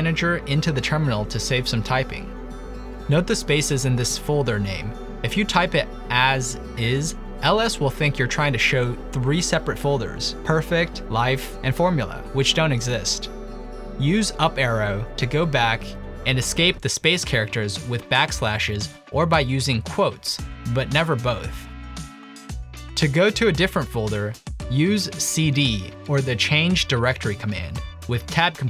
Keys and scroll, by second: 4.5-8.2 typing, 10.0 typing, 12.3 typing, 14.7-15.4 typing, 16.8 ctrl+Left, 17.4 Left, 17.8 typing, 18.3 ctrl+Left, 20.0 Return, 20.0 Up, 20.0 \, 20.2 Up, 20.8 ', 21.7 ctrl+a, 22.2 Right, 22.2 ', 23.1 Return, 23.4 ctrl+l, 24.7-28.3 typing.